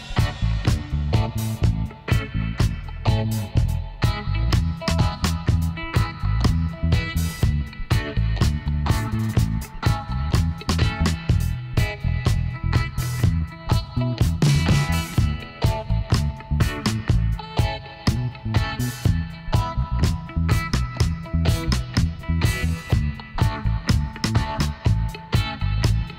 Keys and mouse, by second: 1.4 g, 3.4 z, 4.7 click, 5.0 middle click, 5.5 middle click, 5.7 click, 5.9 middle click, 8.1 middle click, 8.5-10.3 drag, 9.0-11.1 right drag, 10.7 f, 11.1 click, 11.4-13.6 middle drag, 11.8 z, 13.6 ctrl+r, 15.9-17.6 right drag, 16.7 g, 17.6-20.0 drag, 18.7 g, 20.0 s, 22.4 g, 23.4-25.7 drag, 24.8 g.